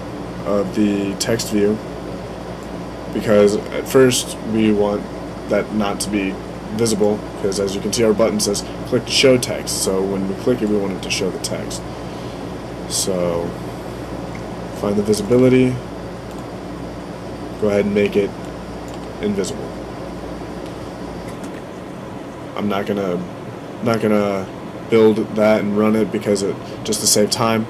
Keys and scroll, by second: 23.6 super+s.